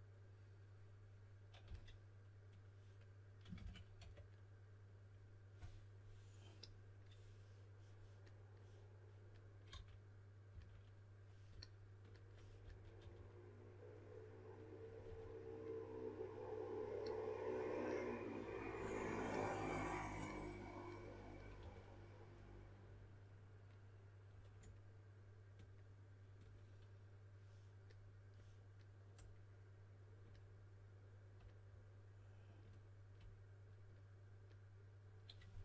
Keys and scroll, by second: 1.6 typing, 3.5-3.9 typing, 9.6-10.4 typing, 12.5-12.9 typing, 15.0 typing, 21.5 4.